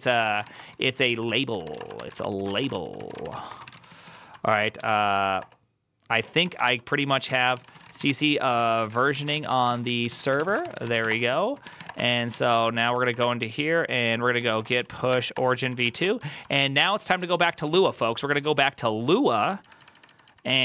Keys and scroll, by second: 0.1-4.6 typing, 4.4 ctrl+a, 5.0 Up, 5.3 Return, 5.9-12.7 typing, 12.8 ctrl+c, 13.0 Up, 13.1 Return, 14.0-18.8 typing, 15.7 ctrl+a, 19.5 Up, 19.7 Up, 19.8 Up, 19.9 Up, 20.1 Up.